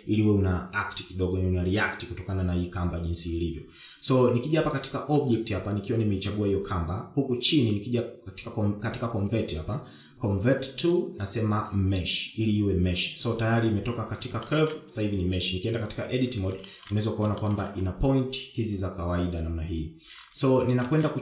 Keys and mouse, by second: 6.9-13.7 drag, 16.2 shift+middle drag, 17.6 Tab, 18.4 shift+middle click, 19.2 shift+middle click.